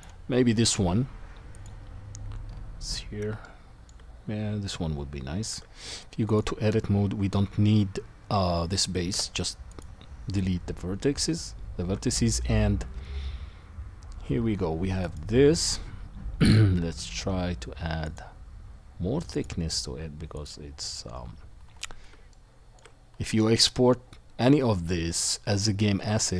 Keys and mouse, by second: 2.6-4.0 middle drag, 4.3-6.3 middle drag, 5.5 Tab, 9.1 Delete, 10.5 Tab, 13.6-15.0 middle drag, 15.1-18.0 drag, 22.9 middle click.